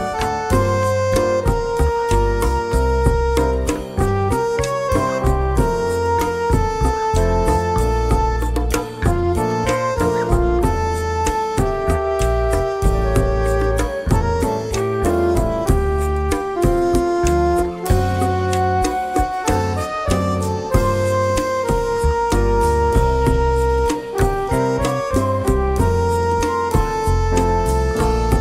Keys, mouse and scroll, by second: 0.3 click, 1.3 click, 2.1-3.4 drag, 3.7 shift+click, 4.5 click, 5.4 click, 5.9 click, 6.6 click, 7.5 click, 8.2 click, 8.7 click, 9.7 click, 10.1 click, 10.8 click, 11.7 click, 14.7 BackSpace, 16.0 click, 16.8-17.5 drag, 17.9 click, 18.5 click, 19.0 click, 19.8 click, 20.4 click, 21.0 click, 21.7 click, 22.3 click, 22.8 click, 23.3 click, 24.5 click, 25.6 F1, 26.8 F7, 27.7 click.